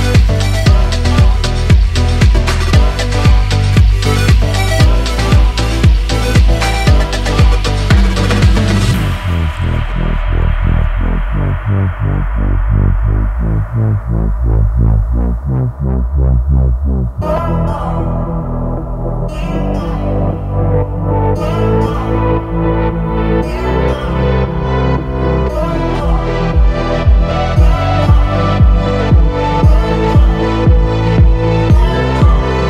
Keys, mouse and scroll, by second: 3.9 click, 5.4-8.3 drag, 8.3-9.7 middle drag, 9.7 3, 10.5 shift+middle click, 11.3 click, 11.7-13.2 middle drag, 13.2 g, 15.2-16.6 middle drag, 16.6 ctrl+r, 22.5-23.7 middle drag, 23.7-25.5 scroll up 1, 25.5 click, 26.1 alt+click, 27.7 s, 30.4 click, 31.0 alt+shift+click, 32.2 alt+shift+click.